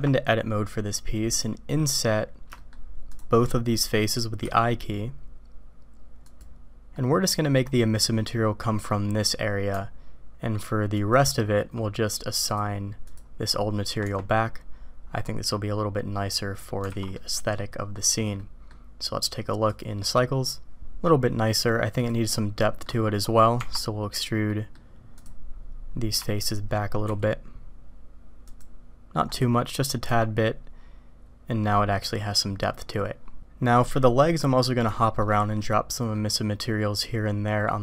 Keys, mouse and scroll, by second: 1.4 click, 1.7 middle click, 2.6 shift+click, 3.1 shift+click, 3.4 middle click, 6.9 click, 8.8 click, 8.8 right click, 10.9 alt+click, 12.4 click, 13.0 click, 14.0 Tab, 16.9 alt+a, 17.1-17.9 drag, 18.4 click, 19.7 click, 21.1 middle click, 22.6 drag, 23.2 middle click, 23.6 Tab, 24.5 click, 24.7 middle click, 25.1 click, 26.4 shift+click, 27.4 e, 30.0 Tab, 33.4-34.4 middle drag, 34.9 shift+middle drag, 36.1 middle click, 36.6 click, 37.0-37.8 middle drag.